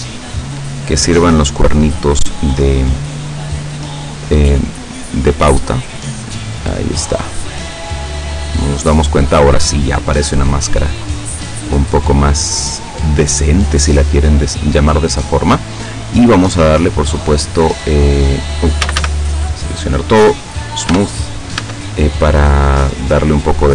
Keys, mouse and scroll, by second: 1.9-3.4 middle drag, 4.6-7.3 drag, 7.5 scroll down 1, 7.9-10.7 middle drag, 12.7 scroll down 2, 13.7-14.1 scroll up 2, 16.7 click, 18.9 a, 20.3 click, 20.9 Tab, 21.6 Tab, 22.3-22.7 scroll down 2.